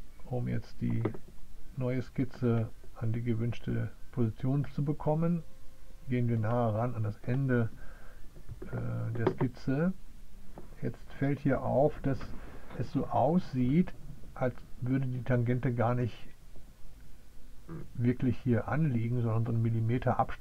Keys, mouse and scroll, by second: 1.5 click.